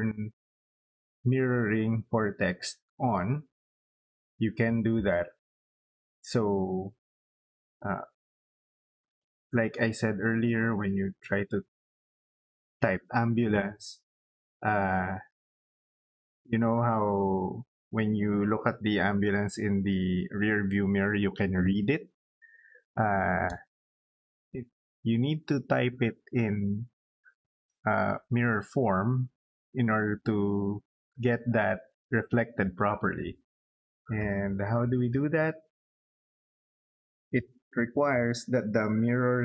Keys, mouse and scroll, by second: 3.2 middle click, 4.3 middle click, 33.6 middle click, 34.0 scroll up 2, 34.5 middle click, 34.8 scroll down 2, 36.3 middle click.